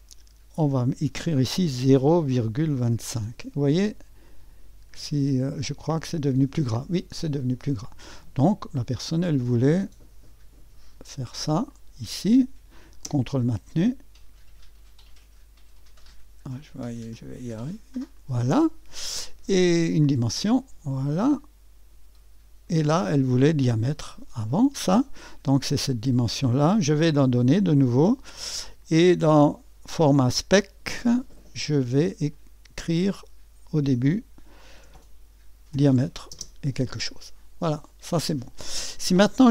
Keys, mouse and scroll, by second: 0.0 click, 1.6-2.9 typing, 4.3 click, 5.8 click, 11.7 click, 18.1 click, 20.0 click, 21.0-22.8 drag, 27.2 click, 32.3 click, 32.9 click, 35.8 alt+shift+o, 36.4 space.